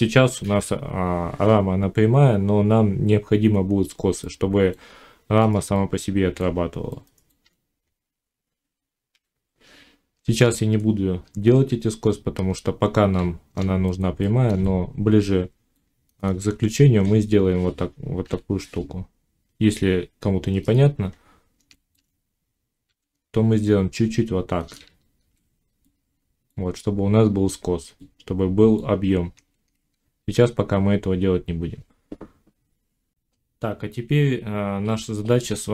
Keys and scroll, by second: 9.0 1, 10.1 Tab, 12.2 z, 22.7 s, 24.7 z, 29.2 ctrl+z, 29.8 Tab.